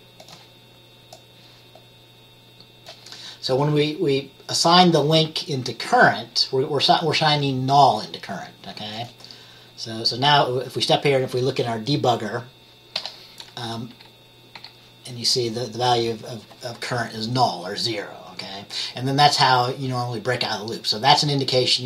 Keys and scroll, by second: 14.0 F10, 14.7 F10.